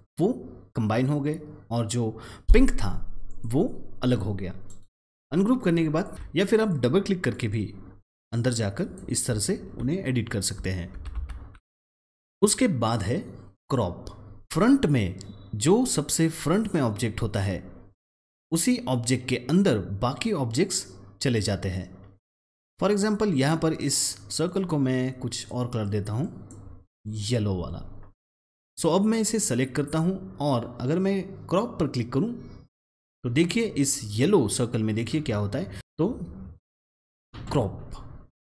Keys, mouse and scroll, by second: 3.2 click, 4.6 right click, 5.5 click, 6.1 ctrl+z, 6.5 click, 7.3 double click, 8.0 click, 10.9 ctrl+z, 11.5 click, 11.7 double click, 12.1 click, 22.9 click, 24.4 double click, 25.4-33.3 drag, 35.7 click, 37.3 click.